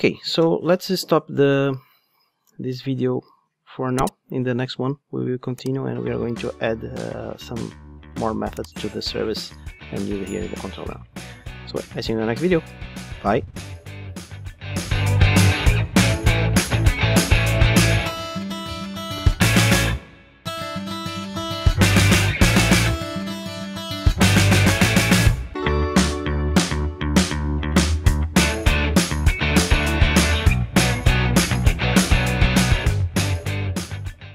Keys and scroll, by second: 1.5 Escape, 2.0 super+z.